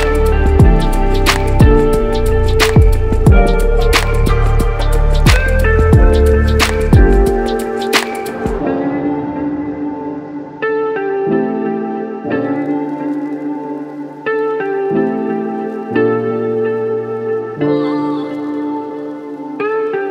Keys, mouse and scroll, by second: 0.2 shift+click, 3.0 shift+click, 3.8 shift+click, 4.5 shift+click, 5.2 shift+click, 6.4 -, 6.4 KP_Subtract, 7.7 shift+click, 9.4 shift+click, 10.4 shift+click, 11.0 shift+click, 11.8 shift+click, 12.3 shift+click, 13.5 shift+click, 14.3 shift+click, 15.0 shift+click, 15.5 shift+click, 17.1 shift+click, 17.7 shift+click, 18.6 shift+click, 19.1 shift+click, 20.0 shift+click.